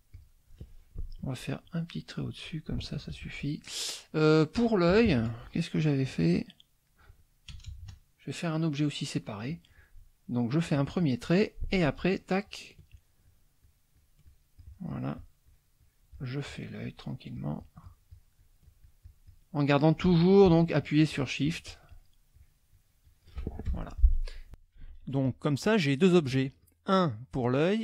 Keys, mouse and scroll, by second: 1.6 shift+click, 2.2 shift+click, 4.9 KP_Subtract, 5.7 middle click, 6.9 click, 7.5 KP_Add, 8.3 middle click, 10.7 click, 11.8 shift+click, 13.6-19.5 shift+drag, 21.0-22.3 shift+drag, 22.3-23.4 shift+drag, 23.7 shift+F1, 23.8 shift+click, 25.5 click, 26.4 ctrl+z, 26.6-27.6 ctrl+drag, 27.7 ctrl+z.